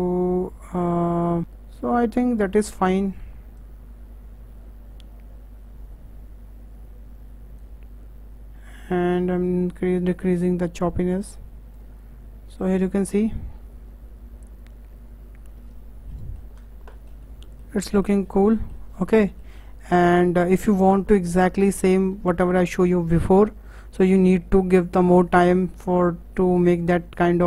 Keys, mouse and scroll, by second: 1.7-6.7 drag, 9.4-12.4 drag, 12.6 click, 15.6 KP_0, 16.1-16.6 middle drag, 16.6-16.9 scroll up 1, 16.9-18.3 shift+middle drag, 18.3 scroll down 4, 18.5 middle click, 18.9-19.2 scroll up 4, 19.2-19.6 shift+middle drag, 19.6 scroll down 4, 19.9-20.2 middle drag, 20.2-20.5 scroll up 5, 20.5-20.8 shift+middle drag, 20.8 scroll down 2, 21.1-25.3 middle drag, 27.3-27.4 scroll down 2.